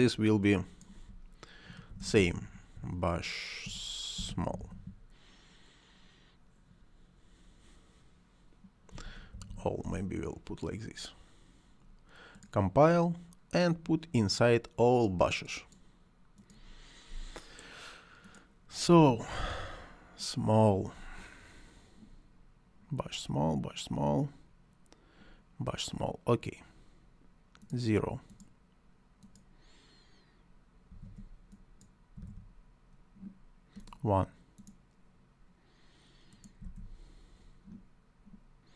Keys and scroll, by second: 1.7 shift+b, 2.1 u, 3.7-4.8 typing, 8.7-9.6 typing, 9.6 Return, 18.7 s, 19.3 m, 30.5-32.1 typing, 36.2-37.0 typing.